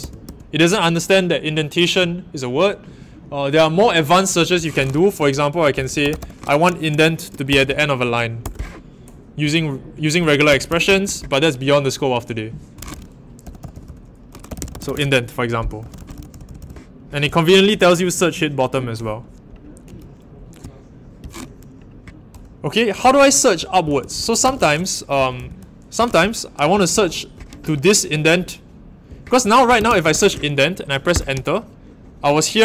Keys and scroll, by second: 0.0-0.2 typing, 5.0-7.5 typing, 8.4 Return, 10.5-11.0 typing, 13.2-16.5 typing, 23.0-27.2 typing, 29.1-30.7 typing, 31.1 Return.